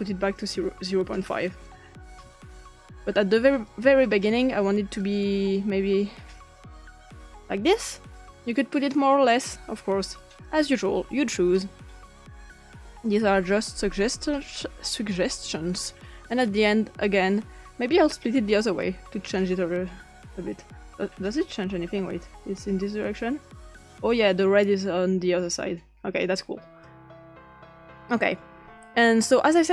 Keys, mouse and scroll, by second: 0.0 click, 0.9 5, 1.7 click, 2.1 typing, 2.7 Return, 3.7-4.1 drag, 5.0 click, 6.5 click, 10.5 click, 12.9 click, 13.9 click, 15.7 click, 16.3 click, 19.3 click, 22.6 click, 23.1-26.9 drag, 28.1 click.